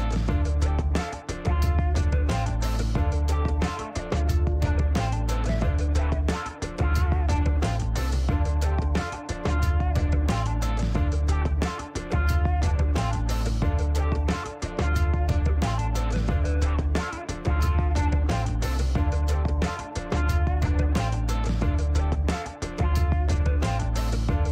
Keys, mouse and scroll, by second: 1.7 shift+scroll down 1, 2.3 shift+right click, 3.5 shift+right click, 4.3 shift+middle click, 4.8 shift+right click, 5.8 shift+right click, 6.5 shift+scroll up 1, 7.0 shift+middle click, 7.3 shift+right click, 8.5 shift+middle click, 9.0 shift+right click, 17.3 scroll down 2, 17.8 middle click, 18.7 shift+right click.